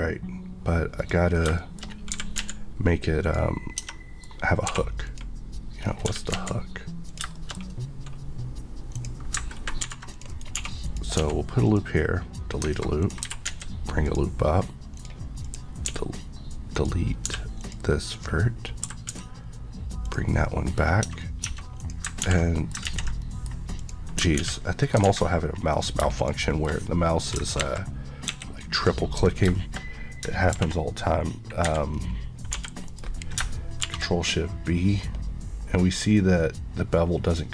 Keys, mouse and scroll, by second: 1.0 click, 1.4 scroll down 1, 1.6 middle click, 2.2 typing, 3.3 click, 3.9 middle click, 4.7 2, 5.1 click, 5.8 click, 5.8 scroll, 5.9 scroll down 1, 6.1 typing, 7.1 click, 7.4 shift+middle click, 7.6 scroll, 7.7-9.0 scroll up 1, 9.0 click, 9.9 ctrl+r, 10.2 click, 10.3 right click, 10.6 1, 10.9 click, 11.2 x, 11.7 click, 13.3 typing, 14.1 click, 15.0 click, 15.6 Left, 15.9 x, 16.8 click, 17.3 x, 17.6 click, 18.9 e, 20.1 click, 20.4 middle click, 20.8-21.1 scroll up 1, 21.1 Tab, 21.2 middle click, 21.5 Tab, 21.8 click, 22.3 ctrl+x, 22.7 middle click, 22.9 ctrl+z, 23.2 middle click, 23.8 click, 24.4 ctrl+x, 24.8 middle click, 25.1 alt+z, 25.8 click, 26.8 middle click, 27.6 ctrl+KP_3, 28.3 ctrl+KP_1, 29.6 shift+middle click, 29.8-30.3 shift+scroll up 1, 30.6 ctrl+b, 31.7 Escape, 32.0 scroll up 1, 32.6 g, 32.9 right click, 33.9 shift+b, 34.9 scroll up 1.